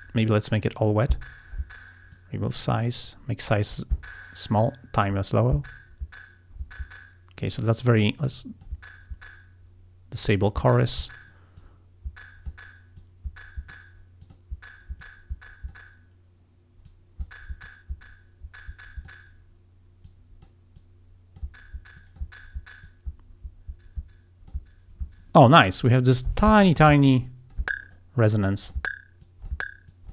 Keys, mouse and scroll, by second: 0.3 click, 2.2 click, 4.7 click, 8.4 click, 11.6-12.7 drag, 13.0 click, 14.3 click, 15.1 click, 16.9 click, 17.7-19.3 drag, 20.1 click, 20.8 click, 22.0 click, 22.9-24.8 drag, 27.3 click, 28.4 click, 29.3 click, 30.0 click.